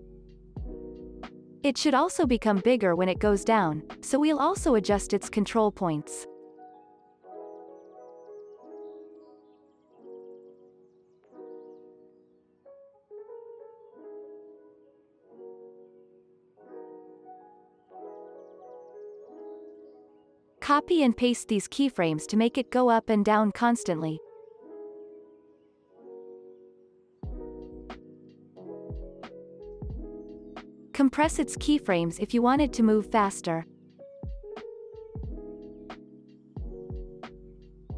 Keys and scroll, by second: 0.7 alt+x, 2.8 alt+x, 4.2 z, 19.3 F9, 20.9 ctrl+c, 21.4 x, 22.4 alt+x, 23.8 ctrl+v, 25.0 space, 26.5 ctrl+s.